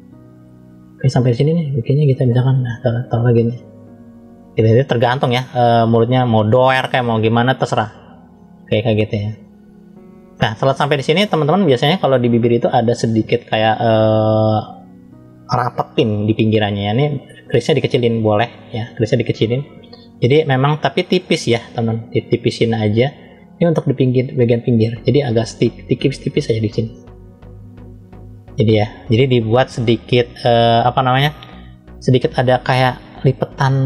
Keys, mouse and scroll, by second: 5.1 middle click, 6.4 middle click, 7.6 click, 10.2 middle click, 15.7 click, 21.2-22.6 drag, 23.6 f, 26.3 click, 31.9-33.2 scroll up 1, 33.2 click.